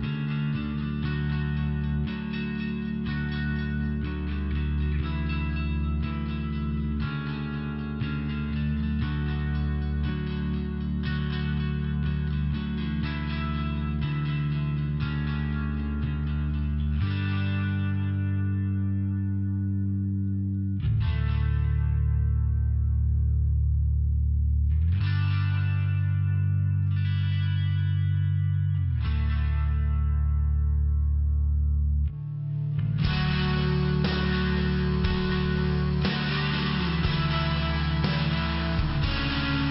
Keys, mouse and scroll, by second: 0.7 click, 1.0 click, 1.4 click, 2.2 click, 5.0 click, 6.2 click, 11.8 click, 12.5 click, 17.4 click, 17.6 click, 17.9 click, 18.2 click, 18.6 click, 18.9 click, 20.0 click, 22.5 click, 22.8 click, 23.4 click, 25.5 click, 26.7 click, 28.2 click, 29.8 click, 30.2 click, 33.0 click, 34.8 click, 35.3 click, 36.5 click, 37.1 click, 37.5 click, 37.8 click.